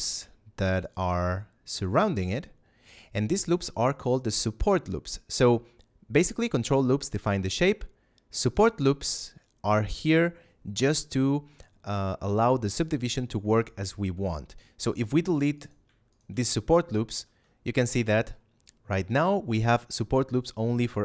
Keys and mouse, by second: 0.7 shift+right click, 1.7 ctrl+right click, 6.1 right click, 7.1 ctrl+right click, 8.3 right click, 9.0 right click, 9.9 ctrl+right click, 15.5 alt+right click, 16.0 alt+shift+right click, 16.9 ctrl+x, 18.1 middle click, 18.9 a.